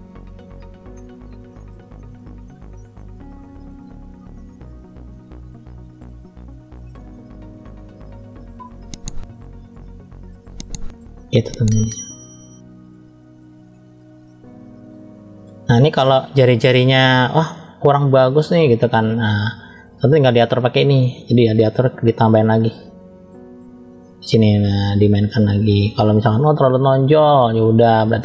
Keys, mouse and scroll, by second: 0.3 middle click, 1.3 click, 2.5 middle click, 3.1 scroll up 1, 3.6 click, 4.3 middle click, 5.3-5.6 scroll down 1, 5.8 middle click, 7.6 click, 11.0 shift+middle click, 11.7-12.0 scroll down 1, 12.4-13.7 middle drag, 12.4 scroll down 1, 14.1 middle click, 15.2-15.7 scroll up 1, 15.7 middle click, 16.9-17.2 scroll up 1, 18.2 click, 20.1 click, 22.9 click, 23.9 middle click, 25.0 click, 25.8-27.0 middle drag, 27.5 shift+middle click.